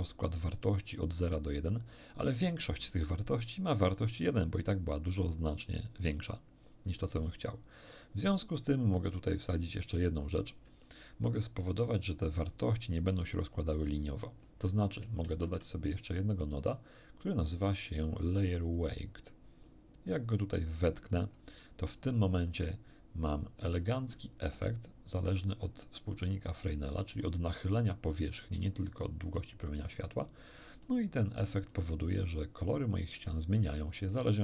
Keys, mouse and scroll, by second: 8.4-9.0 drag, 9.4-10.6 drag, 12.0 shift+scroll down 1, 12.2 middle click, 15.2 shift+a, 18.6 click, 21.1 click, 22.6-24.3 middle drag, 24.4-25.5 middle drag, 25.6 middle click, 26.7 middle click, 28.8 middle click, 29.9 middle click, 30.6 middle click, 31.4 middle click, 32.2-33.5 middle drag, 33.6 middle click.